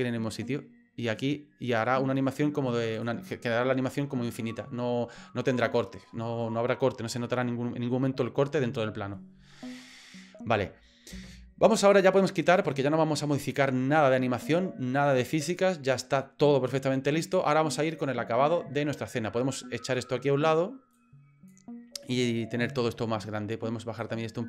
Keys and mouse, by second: 2.9 click, 11.1 space, 20.9 click, 24.0 click.